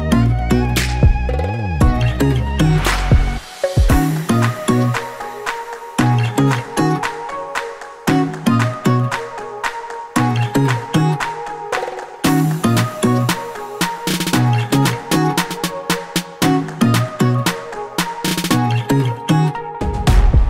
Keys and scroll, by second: 0.1 a, 1.6 Return, 11.0 ctrl+z, 18.2 t.